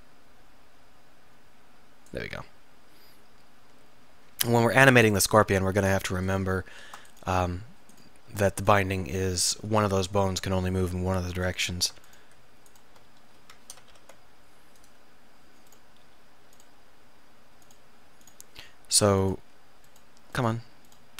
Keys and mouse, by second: 2.2 middle click, 6.3 click, 7.0 Tab, 14.0 ctrl+p.